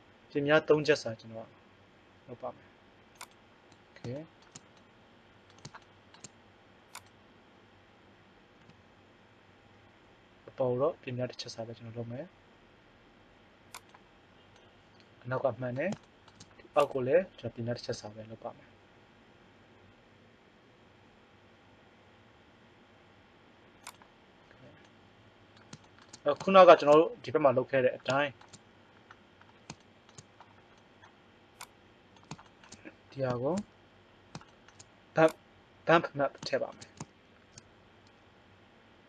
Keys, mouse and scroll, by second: 4.1-5.1 middle drag, 8.6 s, 14.7-16.4 middle drag, 16.8-18.1 right drag, 18.0 s, 24.5 middle click, 25.5 middle click, 26.7 middle click.